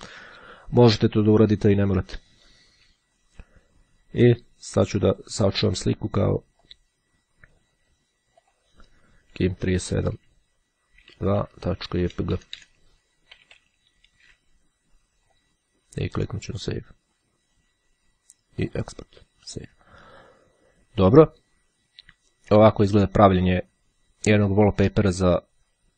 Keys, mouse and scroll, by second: 4.9-5.9 drag, 6.6 click, 8.6 click, 10.1 KP_Subtract, 11.1 Right, 11.3 Delete, 13.4 p, 14.9-16.1 drag, 16.7-17.9 drag, 18.8 click, 19.7 click.